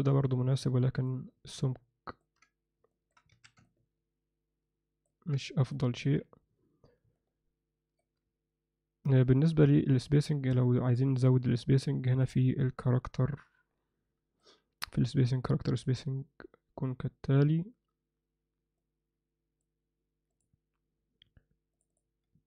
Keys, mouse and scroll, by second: 1.6-2.2 ctrl+middle drag, 2.9 shift+middle drag, 3.3 alt+a, 3.7-5.1 ctrl+alt+middle drag, 5.7 ctrl+alt+middle drag, 7.1-8.0 ctrl+alt+middle drag, 10.2 click, 13.6 click, 18.9 click, 20.3 click.